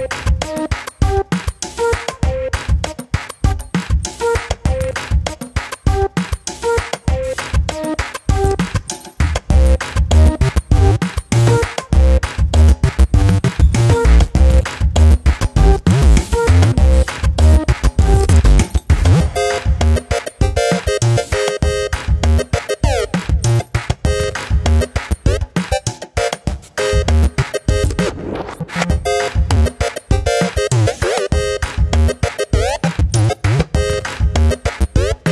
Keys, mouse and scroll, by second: 0.4 middle click, 1.0 2, 1.2 alt+click, 1.5 middle click, 2.3 alt+click, 2.9 alt+shift+click, 3.1 alt+shift+click, 3.4 alt+shift+click, 3.6 middle click, 3.9 g, 4.7 scroll down 1, 4.9 middle click, 5.1 Tab, 5.5 middle click, 5.9 Tab, 6.1 middle click, 6.2 Tab, 6.6 scroll up 1, 6.9 alt+click, 7.4 s, 8.4 middle click, 8.8 scroll up 1, 8.9 ctrl+r, 9.9 scroll down 2, 10.0 middle click, 10.8 scroll down 1, 11.0 middle click, 11.3 Tab, 11.5 middle click, 11.7 s, 12.7-13.2 middle drag, 13.2 s, 13.7-14.3 middle drag, 14.3 s, 14.8-15.5 middle drag, 15.5 scroll up 2, 15.8 `, 16.8-17.6 scroll down 2, 17.6 Tab, 17.8 scroll up 1, 18.4 3, 19.9 shift+z, 20.4 click, 23.1 shift+z, 23.4-25.4 middle drag, 26.5 p, 28.0 Tab, 28.4 click, 28.9 middle click, 29.4 g, 30.9 ctrl+z, 32.3-33.7 middle drag, 33.7 `, 34.6-35.3 scroll up 1.